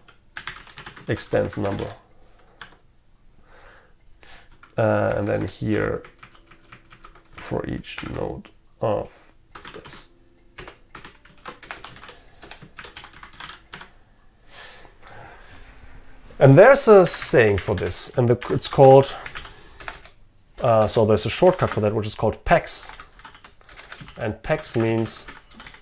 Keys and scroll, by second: 2.7 Escape, 10.7 Return, 13.8 Escape.